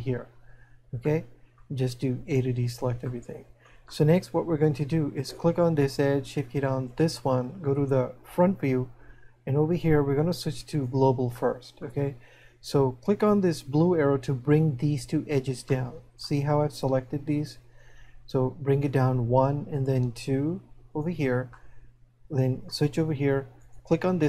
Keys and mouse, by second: 1.2 middle click, 3.1 middle click, 10.2 click, 11.4 middle click, 15.9 middle click, 19.1 click, 21.7 middle click, 23.6 right click.